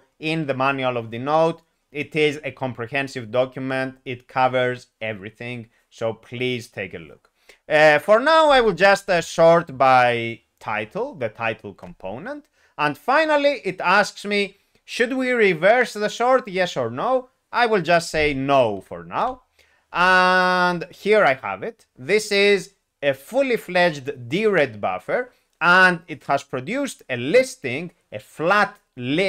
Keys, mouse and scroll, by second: 11.8 Return, 19.2 n.